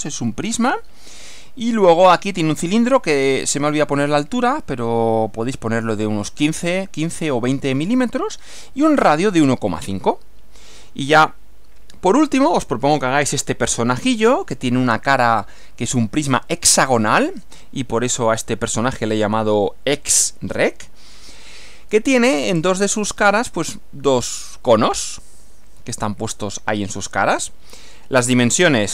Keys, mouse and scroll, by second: 11.1 Right, 28.1 Right.